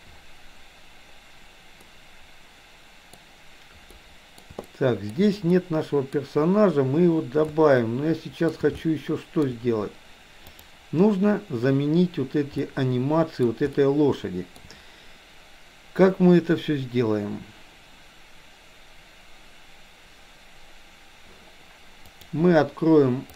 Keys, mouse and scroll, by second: 1.8-3.2 middle drag, 3.9-4.6 middle drag, 4.7-5.2 shift+middle drag, 5.6 middle click, 7.4-8.6 shift+middle drag, 8.8-9.4 shift+middle drag, 10.4 click, 12.7-13.4 middle drag, 13.7-14.7 shift+middle drag, 21.9-23.3 drag.